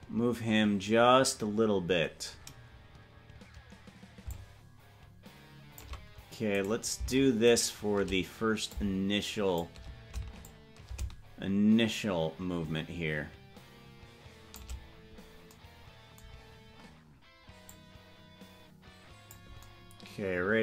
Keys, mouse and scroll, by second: 4.4-6.0 shift+drag, 6.9 right click, 7.9 shift+right click, 8.8 shift+click, 10.5-14.7 shift+drag, 17.8-19.5 drag.